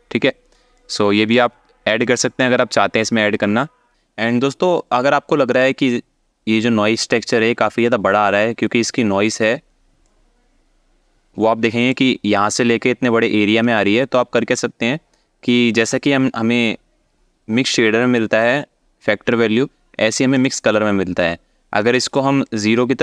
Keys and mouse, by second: 0.6 alt+shift+middle click, 1.6-3.8 shift+drag, 9.8-11.6 shift+drag, 14.1-15.5 shift+drag, 20.0 click, 21.6 alt+shift+middle click, 22.2-23.0 drag.